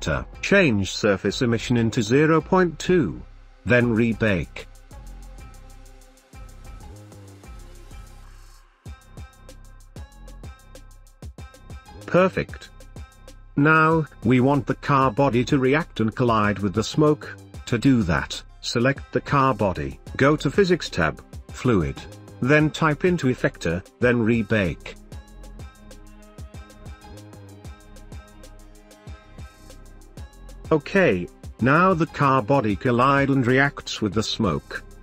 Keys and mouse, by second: 1.7-3.2 drag, 5.7 click, 8.7 space, 19.2-20.7 drag, 23.5-24.0 drag, 24.7 click, 29.1 middle click, 29.3 space, 33.2 space, 34.3-34.7 drag, 34.8 ctrl+s.